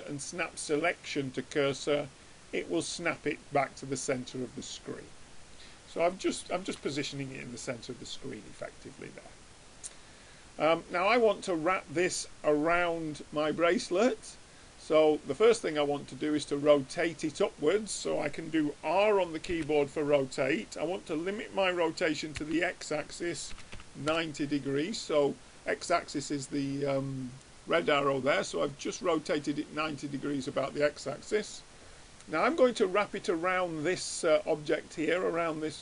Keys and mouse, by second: 3.6-8.0 middle drag, 9.9-11.6 middle drag, 14.2-16.0 middle drag, 19.8 r, 28.2-29.8 middle drag, 30.6-32.6 middle drag.